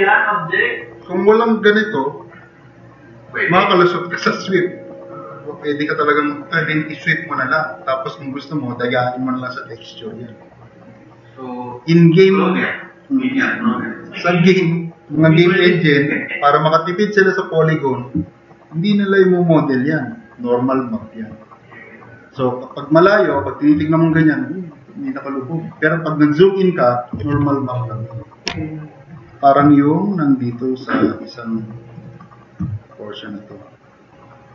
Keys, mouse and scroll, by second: 31.9 click.